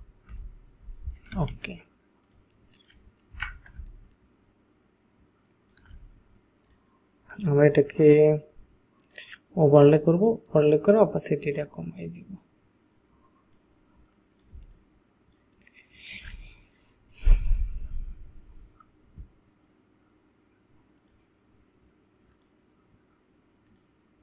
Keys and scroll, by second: 0.3 shift+Return, 1.4 ctrl+a, 3.4 ctrl+d, 3.8 ctrl+space, 14.6 ctrl+space.